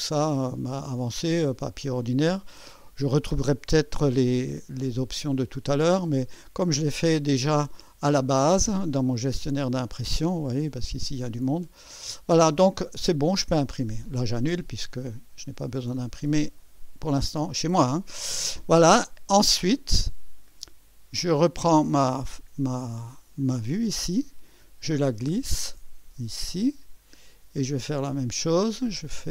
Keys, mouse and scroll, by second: 0.2 click, 9.3-11.3 drag, 11.8 click, 14.0 click, 14.8 click, 16.6 click, 21.5 click, 23.4-29.3 drag.